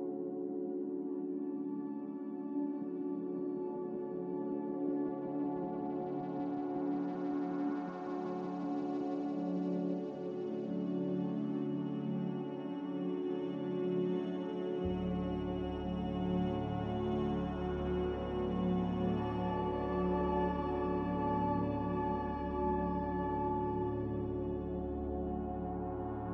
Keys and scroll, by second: 8.0 typing, 8.3 Return, 11.3 Escape, 13.9 typing, 15.0 typing, 15.4 Return, 18.9 1, 20.8 BackSpace, 20.9 2, 21.1 1, 21.4 Return.